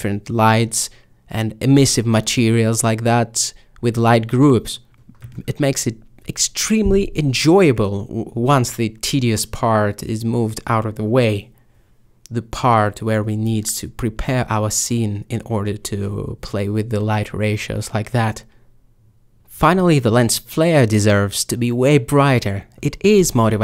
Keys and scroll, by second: 0.6-2.1 typing, 4.4 m, 12.0 m, 20.5 5, 21.7 typing, 22.9-23.6 typing.